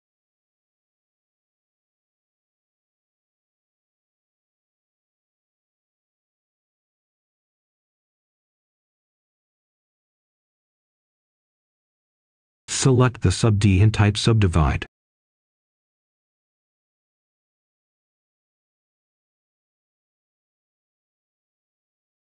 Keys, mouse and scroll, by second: 1.3 Return, 3.4-4.4 drag, 6.2 Delete, 8.0 click, 11.8 typing, 14.4 Return, 16.1-21.2 drag, 21.3-22.2 scroll up 1.